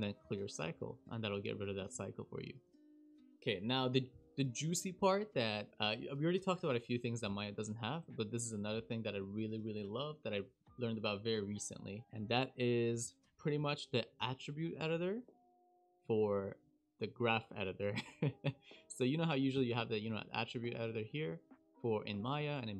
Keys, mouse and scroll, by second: 1.9 shift+e, 3.0 click, 12.0 shift+middle click, 19.5 n, 20.7 click.